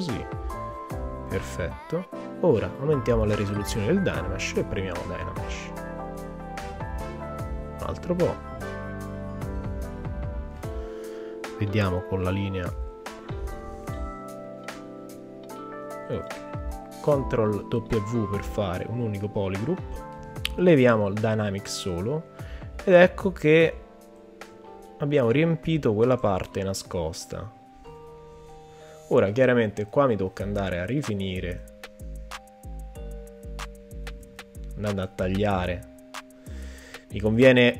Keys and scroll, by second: 5.8 super+z, 14.4 shift+f, 17.7 super+w, 34.2 super+z.